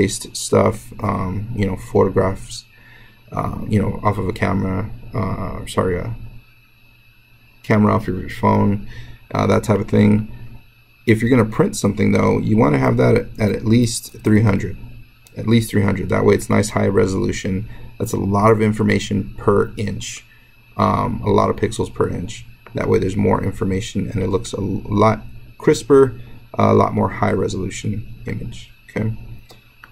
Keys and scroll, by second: 13.3-14.1 typing.